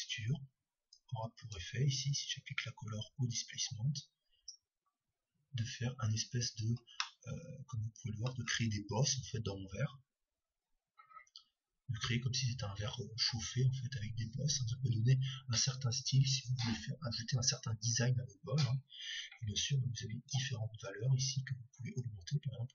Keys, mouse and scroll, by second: 1.1-4.3 drag, 7.4-9.2 middle drag, 20.3-22.1 drag.